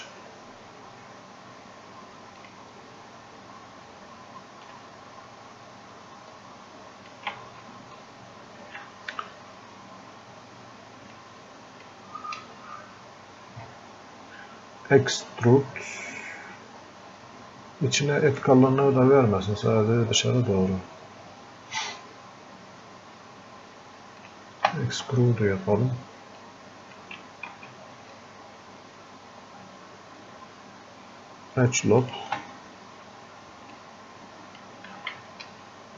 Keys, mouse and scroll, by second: 2.4 click, 6.3 space, 6.4-8.6 drag, 8.6 ctrl+z, 11.4 click, 12.4 space, 16.7 space, 21.6 space, 24.2 click, 26.4 click, 27.5 ctrl+z, 28.3 space, 32.0 click, 33.8 click, 35.0 ctrl+z, 35.6 space.